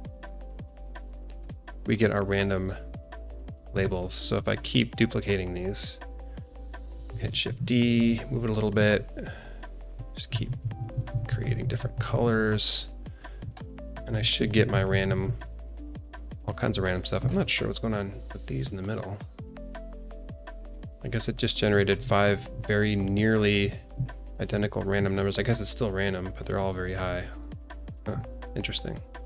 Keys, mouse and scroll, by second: 0.6 click, 1.4 click, 1.8-2.2 scroll down 2, 2.2 click, 2.5-3.1 scroll up 2, 3.1 scroll down 1, 3.3 alt+shift+middle drag, 3.8 scroll down 2, 4.4-4.9 scroll down 2, 4.9 click, 5.2-6.2 scroll down 1, 7.3 alt+d, 9.9-12.0 typing, 12.2-12.6 scroll down 3, 13.0 scroll up 1, 13.5-13.8 shift+middle drag, 14.0-15.2 typing, 15.7 click, 16.1 scroll down 1, 16.4 shift+middle click, 16.6 shift+middle click, 16.8-17.2 scroll up 3, 17.2 alt+shift+middle drag, 17.9 click, 18.9 scroll up 2, 19.6 click, 19.9-21.2 alt+middle drag, 21.3 scroll down 2, 22.2 scroll up 1, 22.6 alt+middle click, 23.1 scroll up 2, 23.7 scroll up 1, 24.0-24.4 shift+middle drag, 25.1-25.5 shift+middle drag, 26.6-27.8 scroll down 5, 27.8 scroll up 1, 28.1-29.2 shift+middle drag.